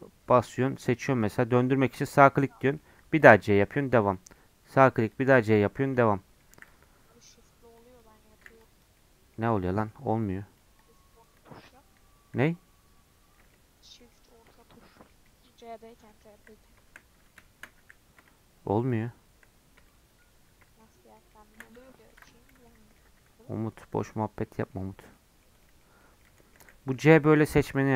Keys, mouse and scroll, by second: 2.2 middle click, 2.9 c, 4.3 middle click, 4.9 c, 6.1 middle click, 6.5 c, 10.8-13.5 shift+drag, 13.5-17.8 shift+middle drag, 17.8 c, 24.3 scroll down 3, 24.4 middle click, 24.7-25.1 scroll up 4, 25.1-27.0 middle drag, 27.0 c.